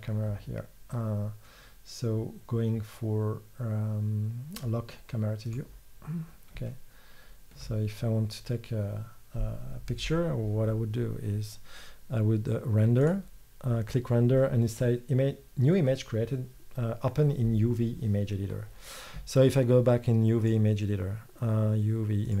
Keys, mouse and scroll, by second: 20.5-22.4 drag.